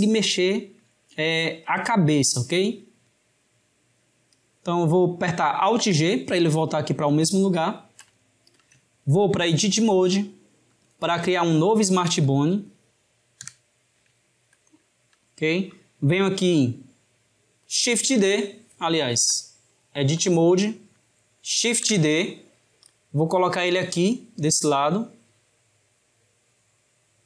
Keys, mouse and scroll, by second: 5.7 alt+g, 7.5-9.9 ctrl+middle drag, 9.9-11.8 drag, 11.8-13.5 middle drag, 13.5 KP_7, 14.3-17.8 ctrl+middle drag, 17.9 shift+d, 19.4-21.6 drag, 21.6 shift+d.